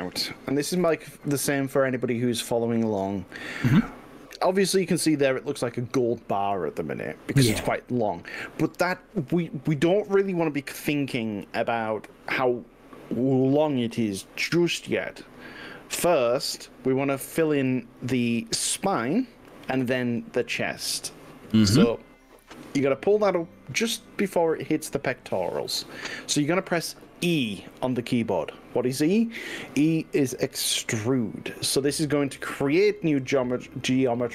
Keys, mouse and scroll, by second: 0.8 KP_1, 17.8 click, 19.0 click, 30.0 e.